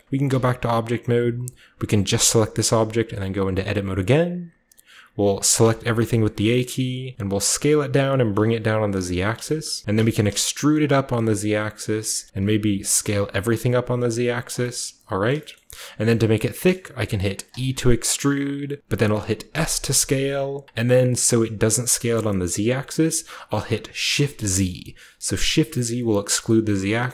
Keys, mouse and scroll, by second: 0.2 Tab, 2.0 middle click, 2.1-5.3 right drag, 3.1 Tab, 5.5 a, 7.1-8.3 typing, 7.9 click, 9.1 click, 9.7 shift+click, 9.9 e, 10.2 z, 11.7 click, 12.3-13.1 typing, 14.3 click, 15.1-16.5 scroll up 1, 16.5-17.4 scroll up 1, 17.4-19.3 scroll up 1, 17.4 typing, 19.4 s, 24.1 shift+z.